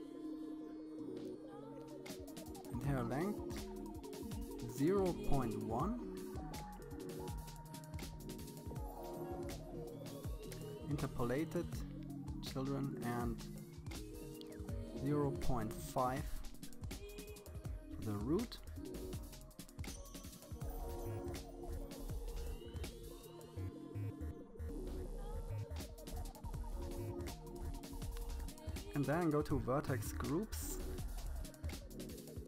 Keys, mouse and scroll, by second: 0.9-2.5 drag, 5.2-9.0 scroll down 14, 9.0 click, 9.9-11.8 scroll down 9, 11.8-13.3 drag, 28.9 click, 29.6-30.2 scroll down 6, 30.2-31.8 scroll up 2.